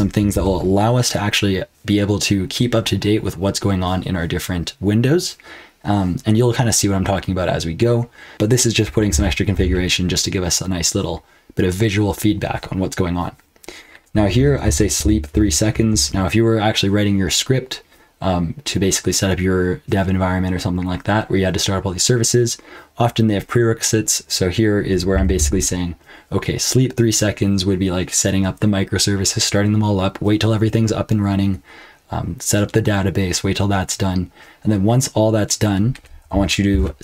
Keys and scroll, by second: 0.3 ctrl+[, 9.1 k, 9.5 j, 13.9-15.4 typing, 15.9 ctrl+[, 25.1 k, 25.4 j, 35.9-37.0 typing.